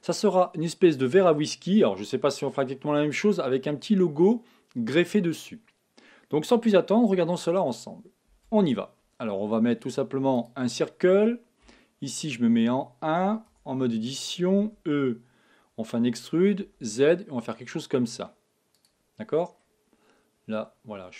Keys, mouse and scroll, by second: 13.4 Tab, 14.5 e, 19.1-20.3 scroll up 1, 20.3-21.1 middle drag.